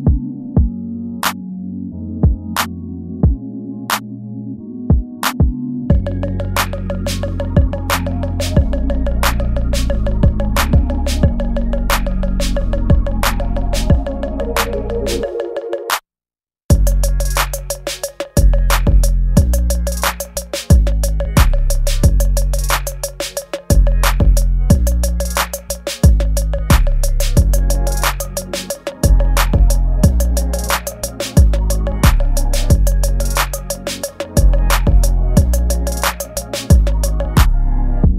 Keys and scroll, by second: 0.3 space, 0.8 ctrl+z, 3.0 space, 3.4 space, 4.3 ctrl+z, 5.9 space, 6.0 ctrl+z, 6.4 ctrl+z, 6.7 ctrl+z, 6.9 space, 9.0 ctrl+s, 9.9 space, 10.5 space, 10.6 ctrl+z, 11.1 space, 11.3 ctrl+z, 11.8 space, 15.3 ctrl+s, 16.6 space, 20.2 ctrl+s, 23.9 ctrl+s, 25.9 ctrl+z, 27.7 space, 31.4 space, 35.2 ctrl+s, 36.5 ctrl+s.